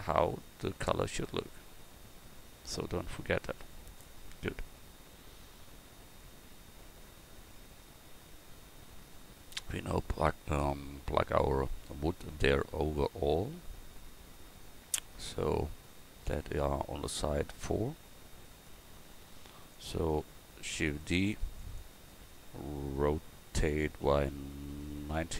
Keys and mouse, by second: 19.0-20.7 drag, 20.7-24.3 right drag, 20.7 shift+d.